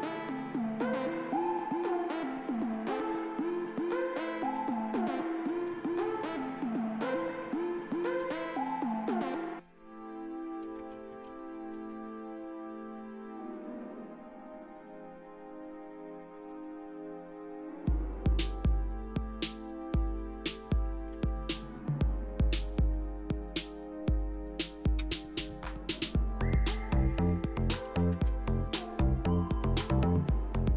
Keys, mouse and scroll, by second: 1.0 ctrl+x, 2.4-3.2 typing, 4.3-7.2 typing, 7.5 Tab, 8.2 Return, 10.4-11.8 typing, 16.4 click, 18.7-20.1 drag, 21.0 ctrl+c, 22.6 click, 23.4 click, 23.9 click, 27.4-28.5 typing, 30.4 right click.